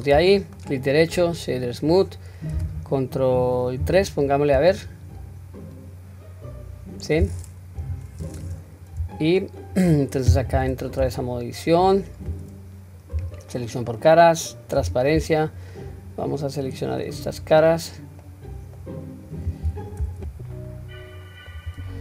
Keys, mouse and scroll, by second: 0.6-2.1 right drag, 3.9 ctrl+3, 4.6-7.1 middle drag, 8.2-8.9 scroll up 3, 8.2 KP_1, 9.1-9.6 shift+middle drag, 10.7 Tab, 13.2 3, 14.8 q, 15.6-17.4 drag, 18.2 middle click, 19.6 q, 20.3-21.5 middle drag.